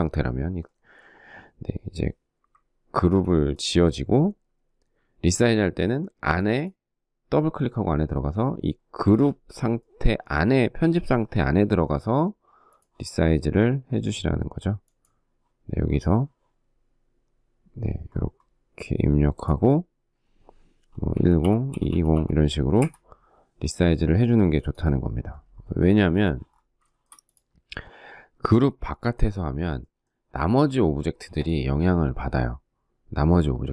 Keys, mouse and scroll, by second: 2.4 ctrl+g, 20.3-22.1 typing, 22.2 Return, 25.3 space, 25.4 Escape, 26.3 shift+middle click.